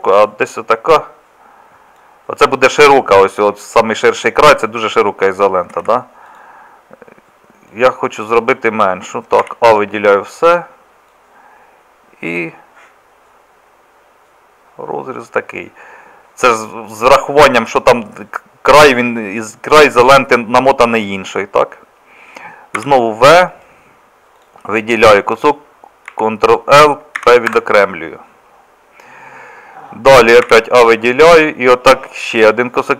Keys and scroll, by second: 5.8 ctrl+z, 9.4 a, 22.8 v, 26.1 ctrl+l, 27.2 p, 30.5 a.